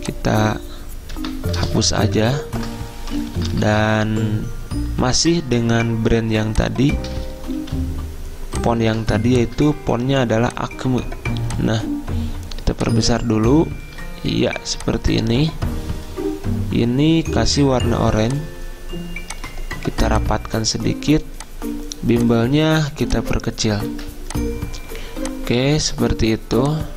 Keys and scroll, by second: 1.3 BackSpace, 2.1 ctrl+Right, 2.3 ctrl+Right, 3.3 BackSpace, 3.5 BackSpace, 7.7 h, 10.4 h, 24.1 ctrl+z.